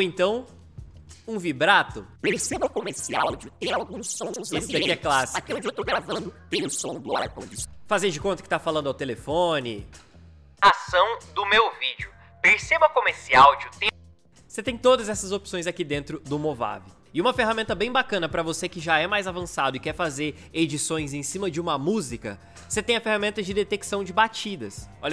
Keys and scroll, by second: 2.1 space, 7.5 space, 7.8 ctrl+z, 9.5 space, 13.8 space.